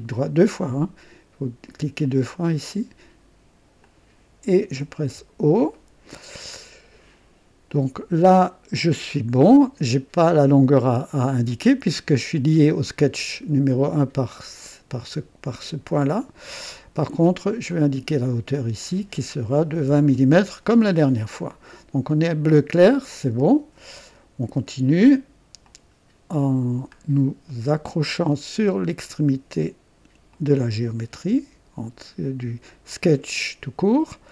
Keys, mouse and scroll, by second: 2.3 click, 3.8 click, 5.0 o, 5.7 right click, 8.4 click, 17.6 click, 18.5 click, 19.6 KP_2, 19.8 KP_0, 20.1 KP_Enter, 21.6 right click, 25.6 click, 26.9-27.2 scroll up 1, 27.5 right click, 30.3 click, 33.9 click.